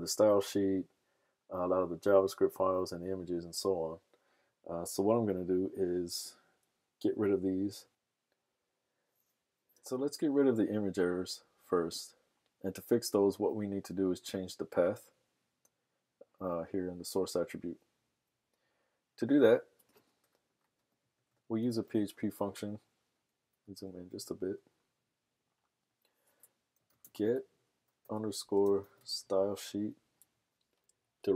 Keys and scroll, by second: 7.9 super+Tab, 21.4-22.3 typing, 25.1 super+=, 26.6-29.7 typing, 30.7 Down, 30.9 Down, 31.0 Down.